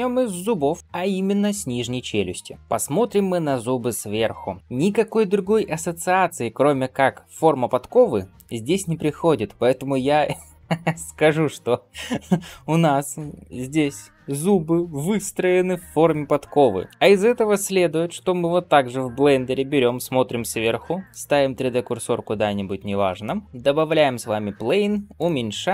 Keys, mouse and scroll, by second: 16.9 alt+shift+z, 16.9 shift+middle click, 16.9-18.0 scroll up 1, 19.0 KP_7, 20.2 shift+middle drag, 20.7 scroll up 1, 21.1 shift+right click, 22.0 scroll up 2, 22.8 scroll up 1, 23.1-23.4 shift+middle drag.